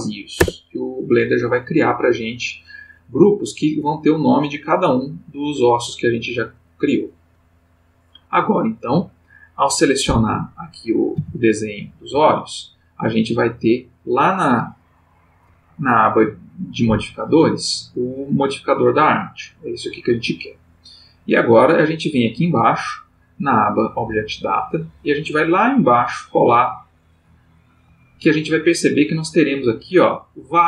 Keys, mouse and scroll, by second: 0.4 Return, 6.8 click, 11.1 g, 12.1 Escape, 13.6 click, 22.0 click, 24.7 middle click, 25.7 middle click, 26.7 middle click, 28.8-30.0 drag, 30.5-30.6 drag.